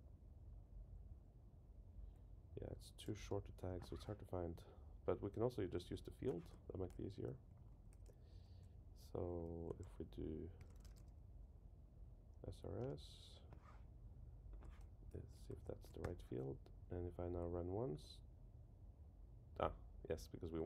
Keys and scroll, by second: 3.5 ⟳, 6.8 shift+Down, 8.6 Up, 9.0 Down, 12.8 Return, 15.0 shift+Up, 15.5 shift+Down.